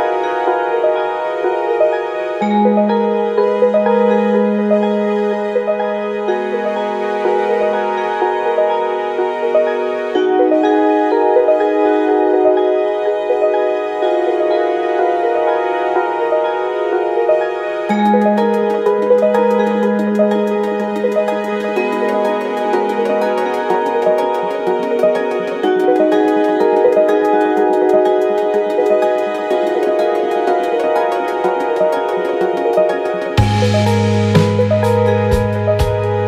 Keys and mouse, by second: 1.1 click, 1.7 click, 3.1 click, 3.7 click, 4.4-4.9 middle drag, 5.4 click, 5.7-7.5 middle drag, 8.3-8.8 shift+middle drag, 10.7 n, 13.0 click, 17.4 click, 19.2-20.9 drag, 24.7-27.9 drag, 30.0-31.3 middle drag, 33.0-36.2 drag.